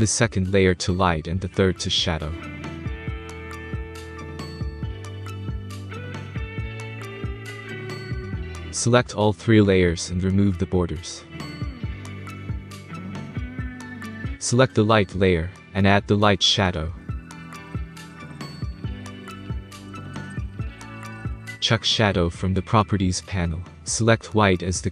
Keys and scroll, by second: 2.1-6.9 typing, 4.4 Tab, 7.5 Return.